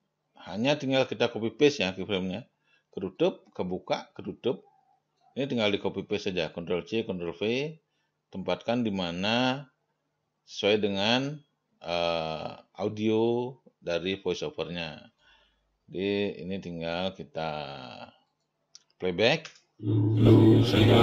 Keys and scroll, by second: 19.9 0.